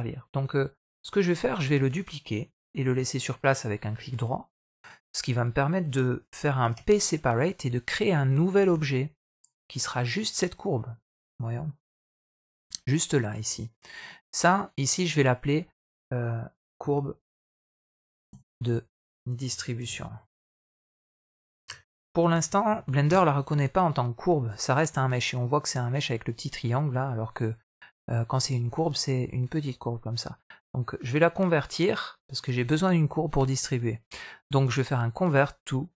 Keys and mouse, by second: 0.8 click, 1.1 middle click, 2.7 shift+d, 3.8 middle click, 6.6 p, 8.5 Tab, 10.0 click, 11.2 middle click, 14.6-22.9 drag, 31.5-35.9 right drag.